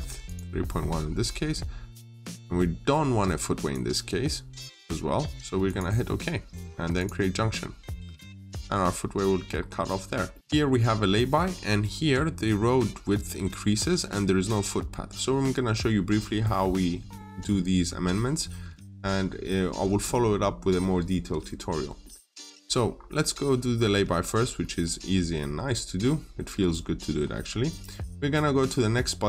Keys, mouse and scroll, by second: 7.7 scroll up 1, 9.5-9.9 scroll down 1, 10.2 middle click, 11.5-14.8 scroll up 1, 14.8 scroll down 1, 21.9 middle click, 22.4-22.8 scroll up 1, 24.5 middle click.